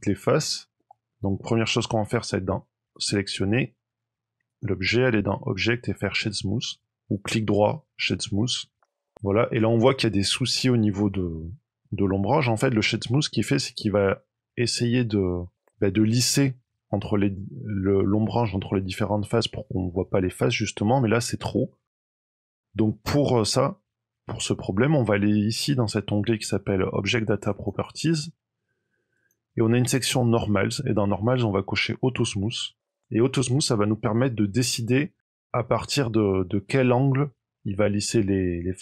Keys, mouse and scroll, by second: 0.2 middle click, 2.0 click, 2.8 click, 7.1 right click, 8.8 middle click, 10.2 middle click, 11.0 middle click, 18.9 middle click, 23.3 click, 27.4 click, 29.1 click, 32.7 click, 35.2 middle click, 38.1-38.8 scroll up 3.